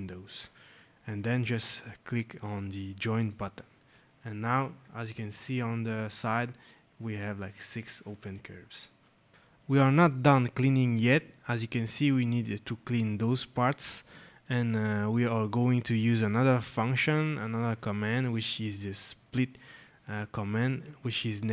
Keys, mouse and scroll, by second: 3.0 click, 8.5 click, 11.2-11.6 scroll, 13.9 scroll, 14.3 right click, 16.8 scroll.